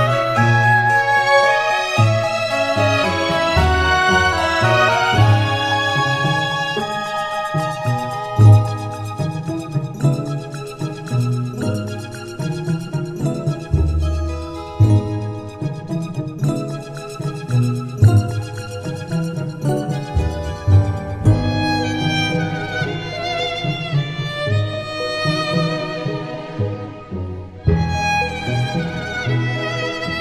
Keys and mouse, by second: 4.4 middle click, 5.2 middle click, 6.4 middle click, 7.1 middle click, 7.8 middle click, 8.5 middle click, 12.2 middle click, 13.2 middle click, 13.7 middle click, 14.0 middle click, 14.8 middle click, 15.4 middle click, 15.7 middle click, 16.3 middle click, 21.9 middle click, 22.7 middle click, 23.3 middle click, 23.6 middle click, 26.0 middle click, 26.4 middle click, 27.2 right click, 28.0 middle click, 28.4 middle click, 28.9 middle click, 29.5 middle click.